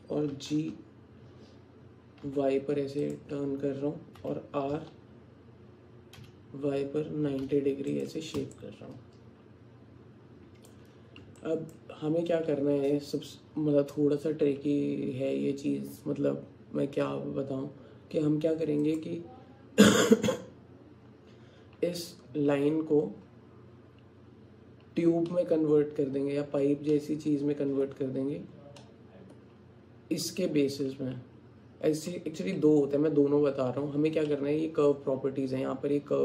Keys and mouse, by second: 0.3 g, 4.2 r, 8.6-10.8 alt+drag, 8.6-10.8 alt+right drag, 11.4 click, 18.8 click, 25.3 click, 26.4 click, 27.0 click, 28.8 click.